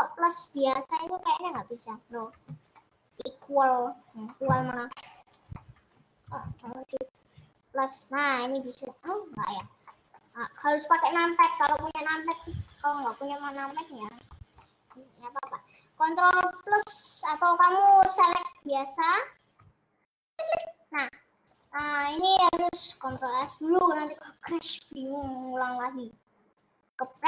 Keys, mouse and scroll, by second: 1.6 ctrl+=, 3.0-7.4 middle drag, 7.4 ctrl+=, 10.1 ctrl+middle click, 11.0-11.4 scroll down 1, 11.4-13.0 middle drag, 13.0 scroll up 1, 13.2 middle click, 13.9-14.4 scroll down 1, 14.4-16.7 shift+middle drag, 16.7 KP_Add, 17.9 middle click, 18.7 click, 19.1-20.9 middle drag, 20.9 click, 24.8 ctrl+s.